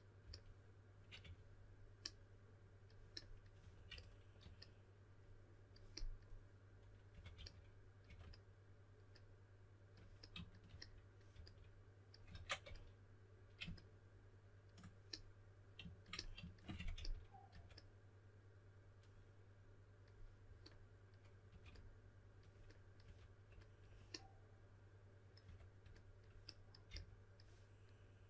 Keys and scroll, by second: 0.0-1.2 typing, 3.6-4.4 typing, 7.1-8.0 typing, 11.3 s, 12.3 super+z, 12.6 s, 16.5-17.5 typing, 21.5 typing, 23.0 2, 25.4 2, 26.9 s.